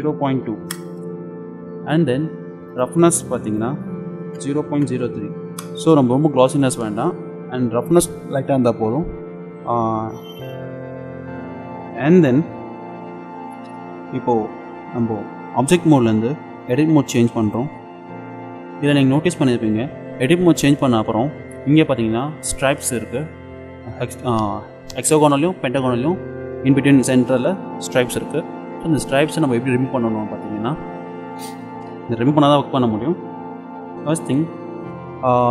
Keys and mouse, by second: 2.8-5.4 drag, 17.7 click.